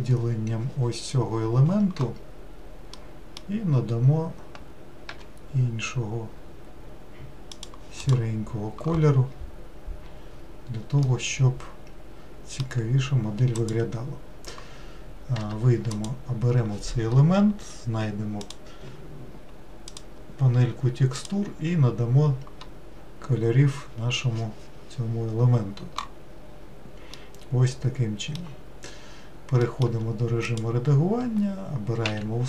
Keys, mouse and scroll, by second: 5.3 g, 8.2 click, 9.4-11.1 scroll down 2, 11.2-13.8 middle drag, 13.8 click, 15.5 Tab, 16.1 click, 26.6 scroll down 2, 27.3-30.0 middle drag, 30.0 Tab, 30.7 click, 32.2 a.